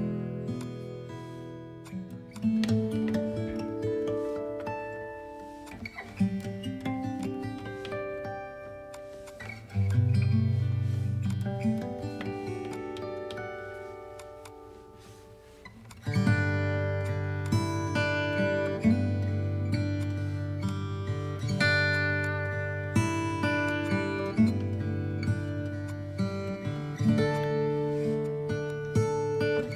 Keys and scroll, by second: 2.2 alt+x, 8.6 b.